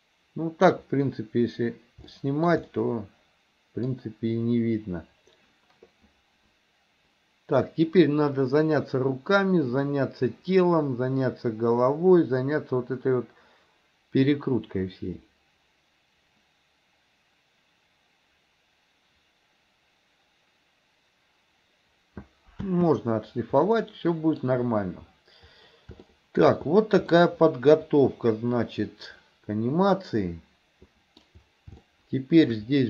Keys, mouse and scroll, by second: 2.2 shift+middle click, 2.7-4.0 middle drag, 22.6 space, 23.6-24.4 middle drag, 26.2 shift+middle click, 27.1-31.3 middle drag, 31.9-32.5 shift+middle drag.